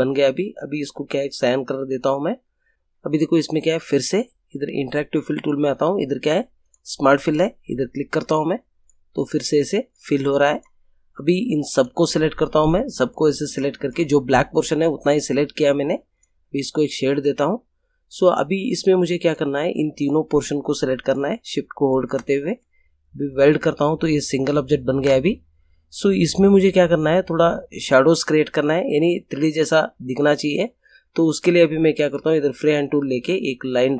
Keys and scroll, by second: 24.9 ctrl+z.